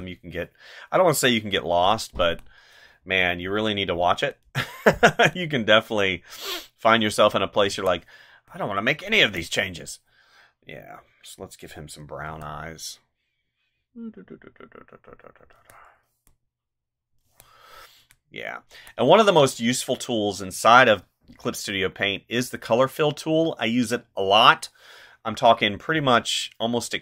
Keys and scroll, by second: 1.5 space, 7.7 space, 9.1 space, 12.3 space, 15.5 space, 17.2 space.